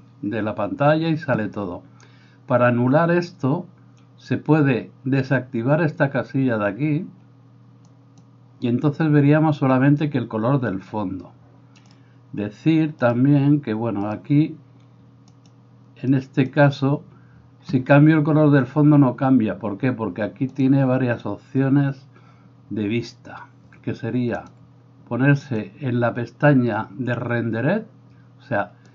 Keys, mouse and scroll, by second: 0.0-8.3 drag, 13.1 click.